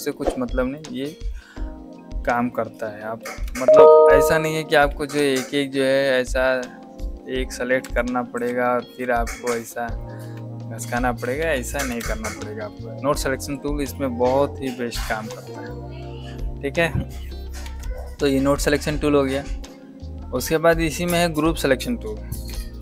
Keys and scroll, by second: 4.8 shift+v, 7.7 F1, 8.3 q, 8.8 shift+a, 11.3 ctrl+z, 11.7 Escape, 13.5 a, 17.5 ctrl+z, 22.4 v.